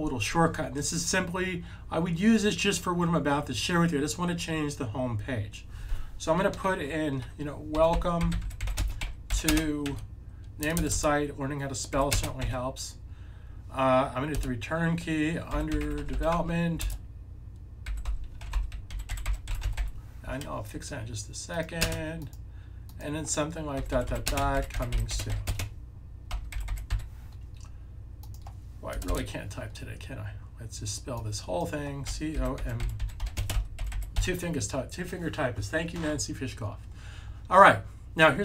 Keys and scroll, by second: 7.7-9.3 typing, 9.8 super+b, 11.9-12.3 typing, 15.2-16.7 typing, 17.8-19.7 typing, 23.6-26.8 typing, 28.6-29.5 typing, 32.0-34.1 typing.